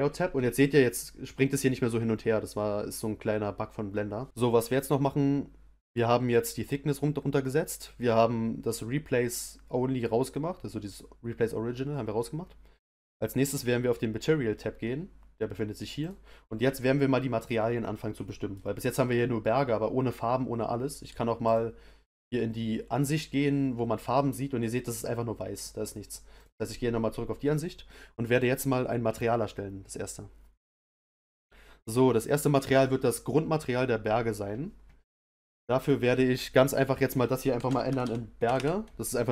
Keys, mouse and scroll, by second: 4.3-19.3 middle drag, 19.3-20.5 scroll down 1, 20.5-21.4 scroll down 1, 21.4 click, 26.3 click, 28.6 click.